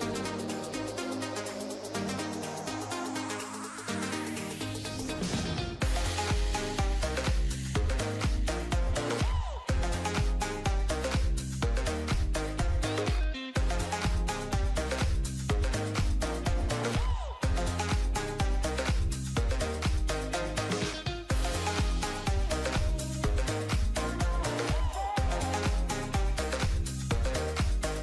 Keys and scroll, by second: 3.2 ctrl+0, 8.9 ctrl+alt+shift+e, 26.2 ctrl+z.